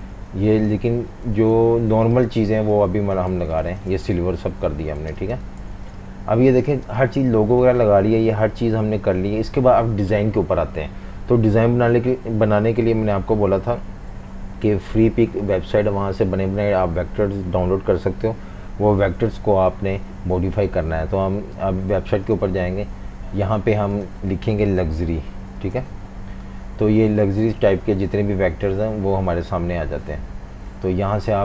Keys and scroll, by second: 0.1 super+3, 0.8 super+3, 1.3 alt+super+3, 3.3 typing, 4.2 super+-, 4.4 super+-, 4.7-6.8 typing, 13.8 F18, 24.6-26.5 typing.